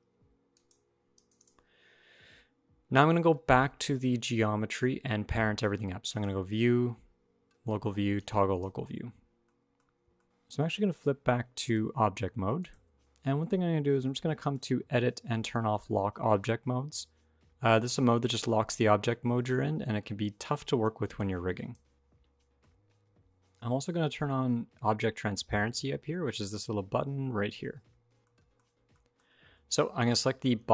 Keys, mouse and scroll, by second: 0.3 click, 5.9 click, 9.2 middle click, 9.6 scroll up 1, 10.0 shift+middle click, 10.2 scroll up 1, 10.2 click, 11.4 click, 14.2 click, 22.4 middle click, 23.4 click, 26.1 click, 28.0 shift+middle click, 28.7 middle click, 29.8 click, 30.5 shift+middle click, 30.6-30.7 scroll up 2.